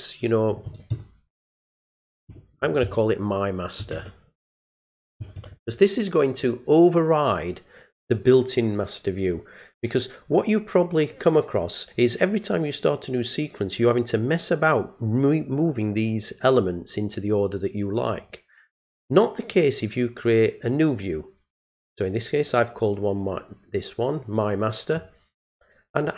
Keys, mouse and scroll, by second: 10.3 click, 18.9 click, 20.3 click.